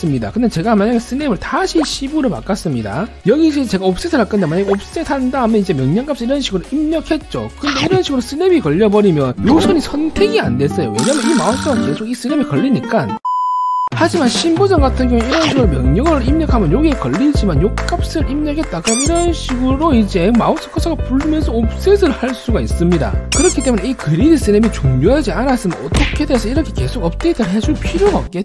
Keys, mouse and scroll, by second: 0.1 click, 0.4 right click, 1.2 s, 1.8 right click, 2.1 1, 3.0 right click, 5.1 3, 5.7 right click, 7.8 right click, 10.1 scroll down 1, 15.9 3, 16.5 right click, 20.0 right click, 21.5 middle click, 22.0 click, 22.4 click.